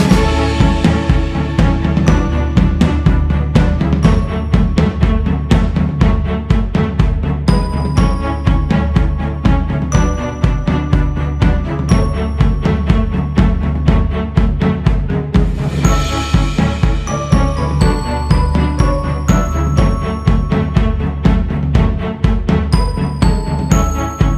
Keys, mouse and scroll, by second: 0.1 click, 0.9 click, 2.2 click, 4.0 click, 4.3-4.7 scroll up 3, 6.3-7.8 scroll up 4, 7.8 click, 8.5 scroll up 2, 9.7 f, 12.7-15.7 drag, 21.3-22.6 scroll down 6, 22.6 click.